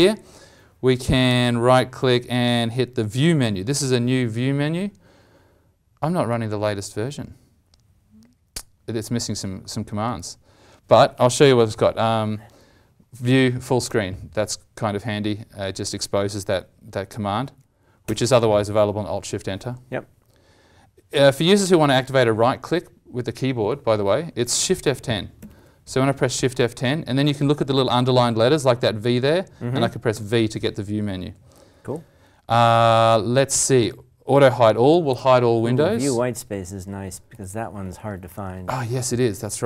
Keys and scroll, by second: 18.0 alt+shift+Return.